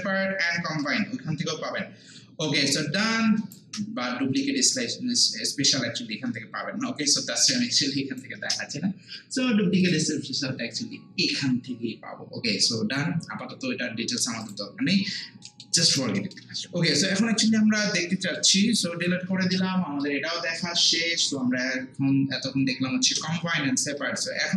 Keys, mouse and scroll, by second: 4.8-9.8 shift+right drag, 9.8 click, 14.4 click, 14.9 scroll down 1, 15.4 scroll up 1, 15.5 alt+middle click, 15.8 alt+right click, 16.2 alt+middle click, 17.7 scroll down 1, 18.3 scroll up 1, 18.4 alt+middle click, 18.8 click, 24.2 scroll down 1.